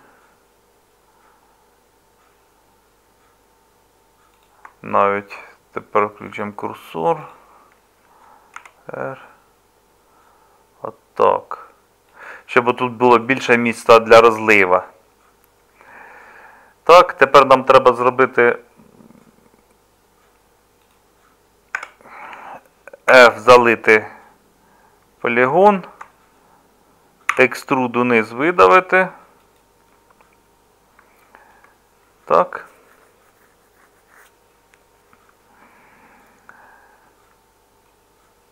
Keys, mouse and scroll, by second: 8.6 r, 21.8 Tab, 23.1 f, 27.3 e.